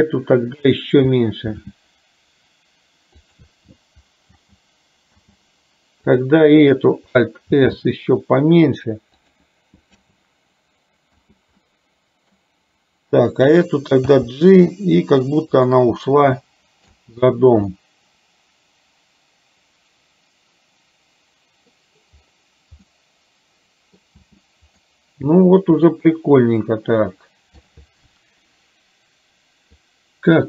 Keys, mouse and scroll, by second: 1.4 alt+s, 4.4 space, 5.2 space, 7.6 alt+s, 10.1 space, 11.2 space, 11.7 middle click, 14.5 g, 16.1 middle click, 17.1 space, 17.8-21.7 middle drag, 23.0-24.1 middle drag, 24.2 space, 24.9-27.8 middle drag, 30.0 click.